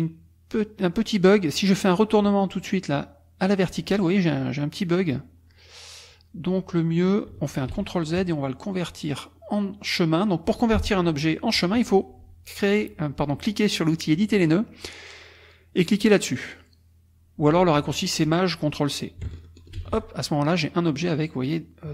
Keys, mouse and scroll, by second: 3.5 click, 7.7 ctrl+z, 14.3 click, 19.7 ctrl+shift+c.